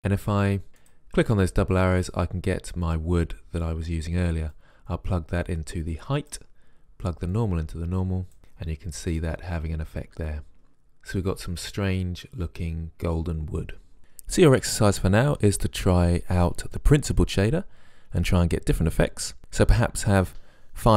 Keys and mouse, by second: 1.1-2.9 drag, 4.9-6.6 drag, 7.6-8.4 drag, 8.6-10.8 middle drag, 12.7 middle click, 16.7 click, 17.1 click, 17.4-20.5 middle drag.